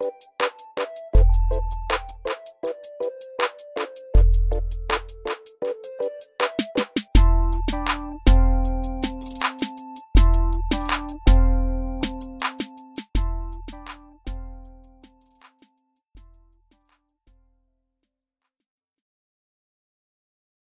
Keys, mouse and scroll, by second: 1.8 click, 2.7 x, 3.3 click, 5.1 9, 6.1 click, 7.1 F12, 10.7 F12, 18.1 click, 18.6 typing, 19.3 click.